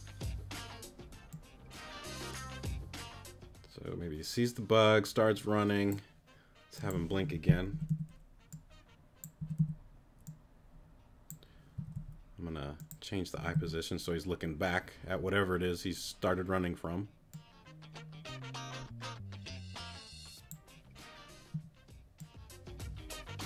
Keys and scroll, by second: 7.7 Right, 9.4 Right, 11.7 Left, 13.3 Right.